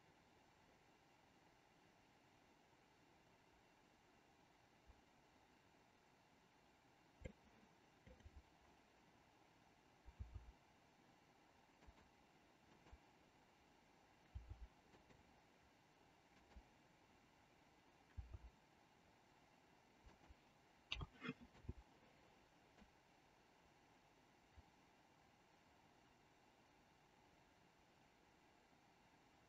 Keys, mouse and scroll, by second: 8.0-9.4 drag, 10.2 r, 12.7-14.0 drag, 14.4 r, 16.3-17.5 drag, 18.0 r, 20.9 a, 21.5 i, 22.9-29.4 drag.